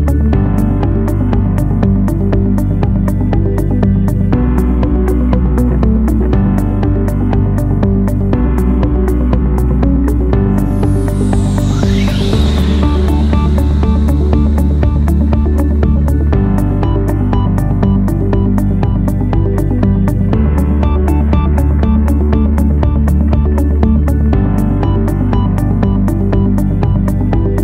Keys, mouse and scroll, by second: 6.8 ctrl+8, 22.7-23.6 typing, 23.7 Return.